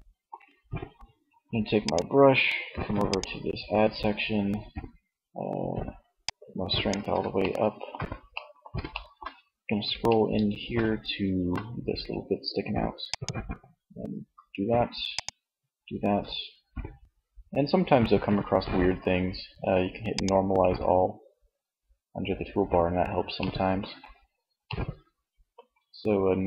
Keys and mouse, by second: 1.1-2.9 drag, 5.4-7.2 drag, 19.3-21.1 drag, 22.5-23.8 middle drag.